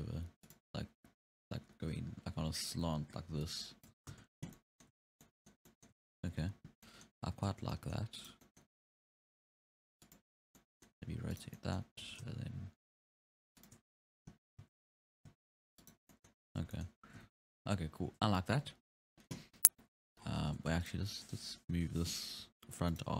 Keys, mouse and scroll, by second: 2.0 f, 3.3 d, 3.4-3.9 drag, 3.9 d, 4.1 ctrl+z, 4.4 scroll down 5, 4.5-5.0 middle drag, 5.0 ctrl+Tab, 5.2-6.0 middle drag, 6.0 alt+a, 6.2-6.8 scroll up 4, 6.8 scroll down 1, 6.8-7.5 middle drag, 7.5 ctrl+Tab, 7.7-8.2 middle drag, 8.2 right drag, 8.4-8.9 middle drag, 8.9 r, 10.6-11.4 middle drag, 11.4 right drag, 11.6-12.1 middle drag, 12.1 r, 14.7 ctrl+z, 15.0 r, 16.1 scroll down 2, 16.2-16.5 middle drag, 16.5 alt+a, 16.7-17.3 middle drag, 17.3 ctrl+Tab, 19.9 scroll down 2, 20.2-20.6 scroll up 6, 20.6 ctrl+Tab, 20.9 right drag, 21.1 middle click, 21.8 KP_3, 22.4 r.